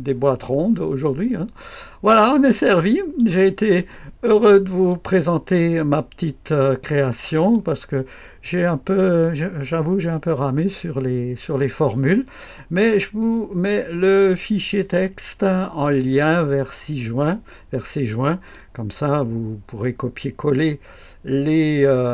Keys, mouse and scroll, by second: 4.4-5.7 right drag, 6.5-8.3 right drag.